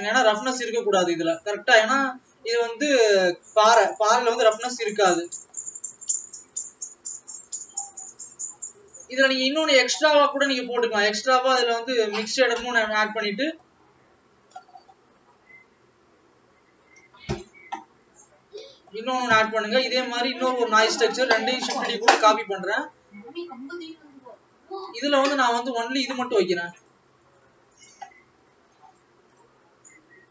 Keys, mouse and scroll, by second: 0.3 click.